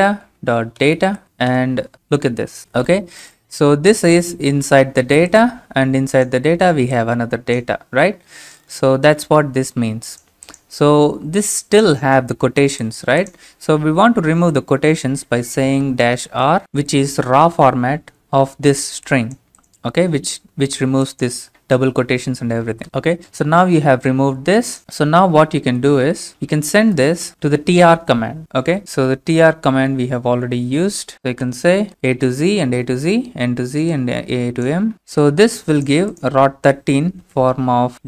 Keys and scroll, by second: 0.0-1.7 typing, 14.2 Home, 14.5 Up, 15.7-17.1 typing, 22.8 Return, 25.6 Down, 26.4-28.5 typing, 31.4 space, 31.8 ctrl+v, 32.2 Right.